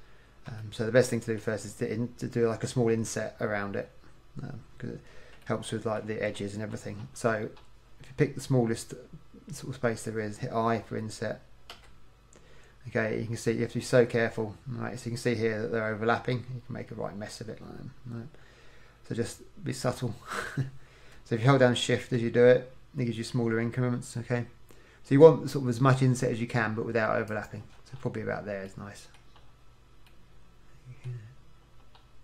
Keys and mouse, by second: 6.8-10.3 middle drag, 11.8 i, 28.0 click, 28.8 middle click, 32.1 middle click.